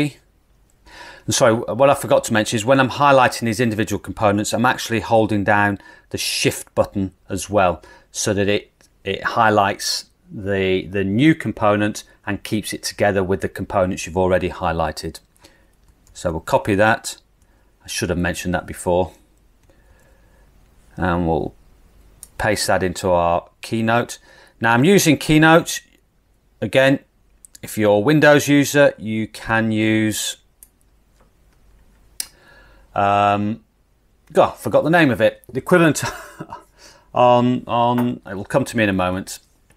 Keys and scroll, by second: 16.2 super+c, 18.5 super+c, 19.9 super+v.